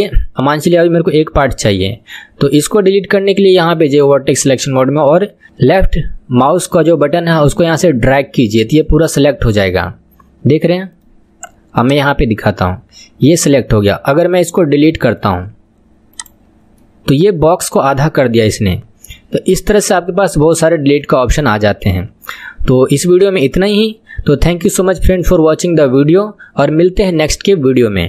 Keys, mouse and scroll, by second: 1.3 KP_7, 3.5-4.6 drag, 9.6-11.9 middle drag, 11.9 click, 12.2-15.1 middle drag, 15.1-16.8 right drag, 16.8-19.9 middle drag, 20.5-22.5 middle drag, 22.5-22.9 scroll up 1, 22.9-27.5 middle drag.